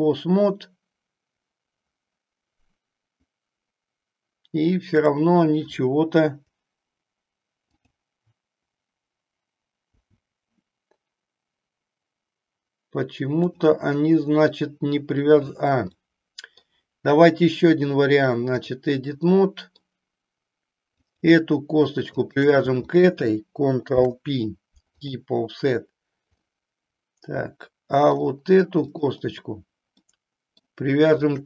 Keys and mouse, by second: 5.0 click, 9.8 g, 16.0 middle click, 17.7 click, 19.3 middle click, 21.0 click, 22.1 shift+click, 23.8 ctrl+p, 26.5-28.2 middle drag, 28.8 click, 30.1 middle click.